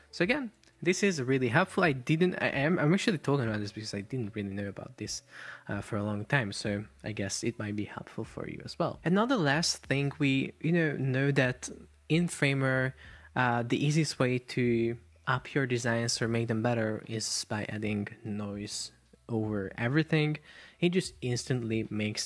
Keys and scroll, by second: 5.0 Escape.